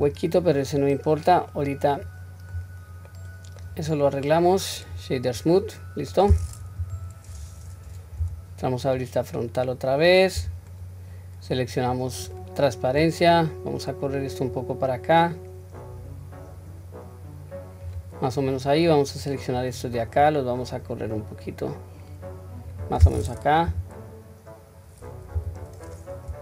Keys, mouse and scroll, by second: 0.1-0.6 scroll up 1, 0.6-1.5 middle drag, 0.6 scroll up 1, 2.0-2.6 scroll down 1, 3.1-3.6 middle drag, 3.1 scroll down 3, 4.3 right click, 5.5-6.3 middle drag, 6.8 KP_1, 7.2-8.2 scroll up 3, 8.2 Tab, 9.0 scroll down 1, 10.4 q, 11.9-13.0 drag, 14.1-17.9 drag, 18.7 click, 20.2-22.7 drag, 23.7 KP_3, 25.3 KP_1.